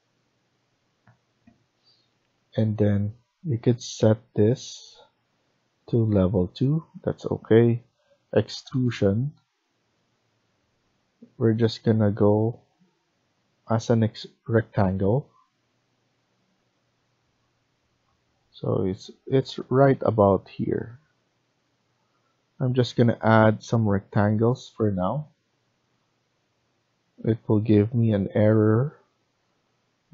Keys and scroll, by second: 22.5 Escape, 28.1 Escape.